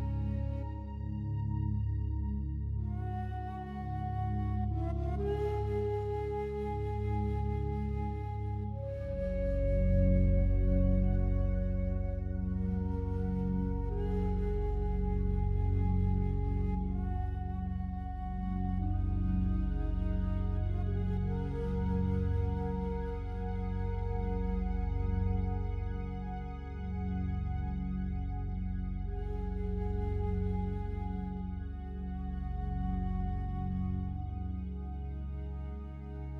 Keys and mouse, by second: 0.7 typing, 2.0 click, 2.3-3.1 typing, 2.8-3.1 alt+drag, 3.4 ctrl+alt+click, 5.2 click, 5.5 typing, 7.3 click, 8.7-9.4 typing, 9.6 click, 11.8 click, 12.9 click, 13.3 click, 14.0 click, 14.3-14.8 drag, 15.1-15.6 drag, 16.2-17.6 typing, 16.4 click, 18.6 click, 18.9 click, 19.5-20.3 typing, 21.4 click, 21.8 click, 22.4-23.5 drag, 24.1 click, 24.4 click, 24.9-26.9 typing, 28.0 click, 28.6 click, 29.2 typing, 29.5 click, 30.4 click, 30.6 click, 31.3-32.3 typing, 32.8 click, 33.6 click, 34.5 click, 34.8 click, 35.2-36.1 typing.